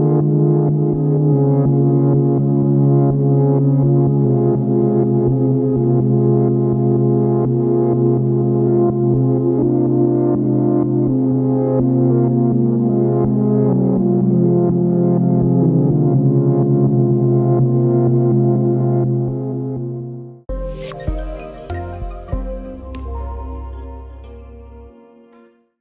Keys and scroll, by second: 9.4 ctrl+Home.